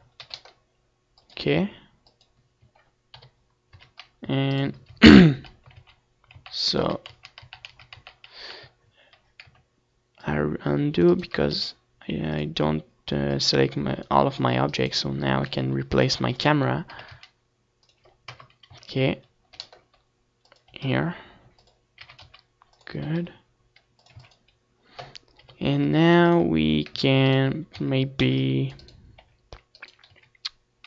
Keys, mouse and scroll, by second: 0.3-2.7 drag, 0.4 g, 2.1 KP_7, 2.6 a, 3.2 c, 4.0 ctrl+z, 4.5 ctrl+z, 5.6 ctrl+z, 6.0 ctrl+z, 6.3 ctrl+z, 6.6 ctrl+z, 6.8 ctrl+z, 7.2 ctrl+z, 7.5 ctrl+z, 8.2 c, 9.9-11.7 right drag, 10.1 r, 11.2-13.8 drag, 13.4-15.0 right drag, 14.3 g, 15.2-18.3 drag, 15.6 r, 17.0 KP_0, 17.4 z, 18.3 g, 19.2-24.3 drag, 19.3 g, 20.6 r, 21.6 g, 22.7 ctrl+s, 23.9 KP_7, 24.3 a, 24.7 ctrl+s, 25.1 middle click, 25.5 c, 26.1 z, 26.8 c, 27.6 r, 28.7 a, 29.8 c.